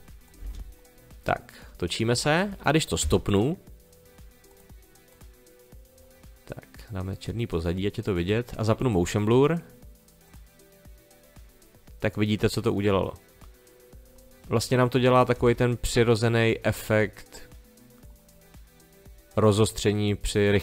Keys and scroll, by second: 0.4 space, 3.0 space, 15.3 space.